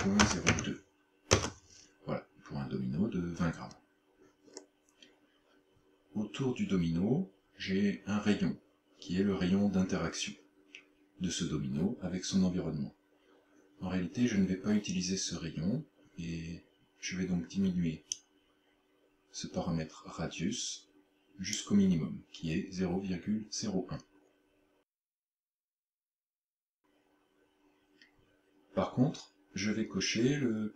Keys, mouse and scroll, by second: 4.6-4.9 scroll down 5, 18.2 click, 24.7 scroll down 1, 25.2-25.8 scroll down 3, 26.5-27.2 scroll down 1, 27.2-28.1 scroll down 1.